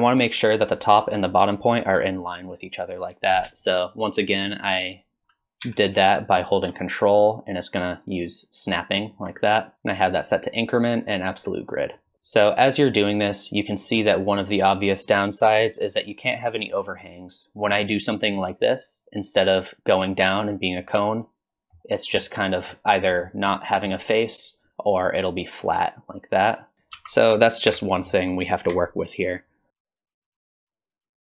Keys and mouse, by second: 5.6 g, 9.7-11.4 drag, 15.5-20.8 drag, 20.8-21.8 middle drag, 22.2 middle click, 23.0 middle click, 23.7 middle click, 24.7-26.9 drag, 26.9 ctrl+z, 27.7 KP_1, 28.5 shift+middle click, 29.7-31.2 typing, 31.0 ctrl+z.